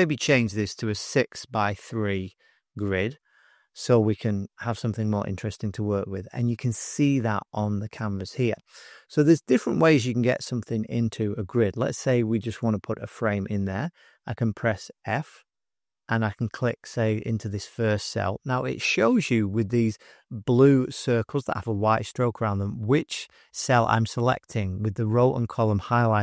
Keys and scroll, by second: 0.9 6, 1.4 Tab, 1.7 3, 4.5 Return, 14.9 f.